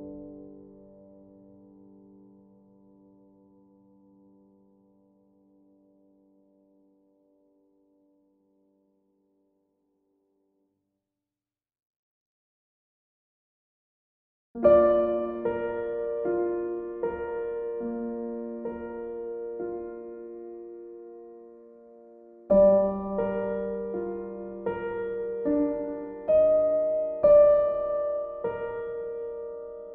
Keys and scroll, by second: 20.4 ctrl+z.